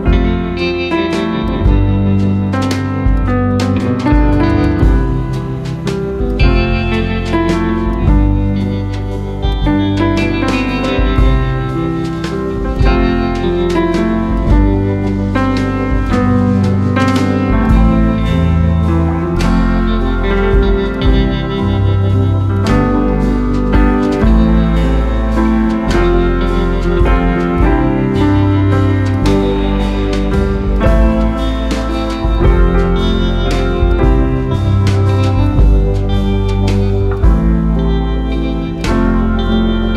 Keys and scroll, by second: 2.0 ctrl+v, 14.8 ctrl+a, 15.3 ctrl+c, 16.2 ctrl+v, 31.0 ctrl+a, 31.4 ctrl+c, 32.5 ctrl+v.